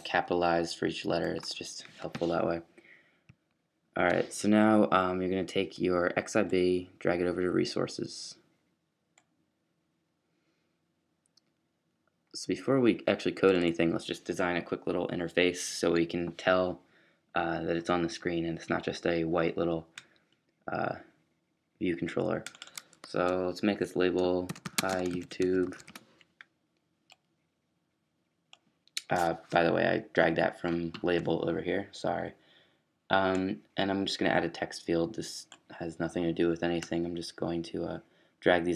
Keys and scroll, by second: 24.4-25.8 typing, 27.0-27.7 typing.